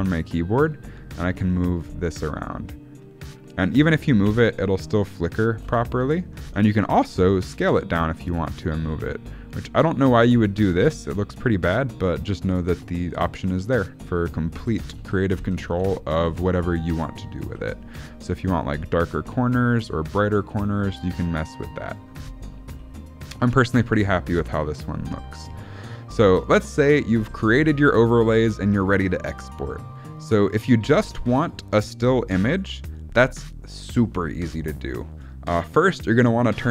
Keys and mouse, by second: 4.2 space, 5.6 space, 6.4 ctrl+z, 6.9 s, 8.3 g, 8.8 s, 10.1 g, 10.7 space, 14.5 space, 14.9 ctrl+z, 15.3 ctrl+z, 15.7 ctrl+z, 16.2 ctrl+z, 17.4 s, 22.7 s, 27.7 shift+middle click, 36.6 click.